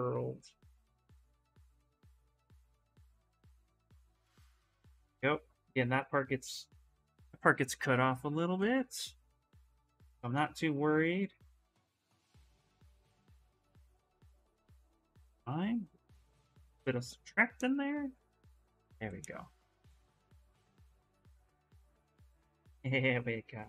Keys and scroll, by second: 9.5 s, 14.5 s, 19.4 s.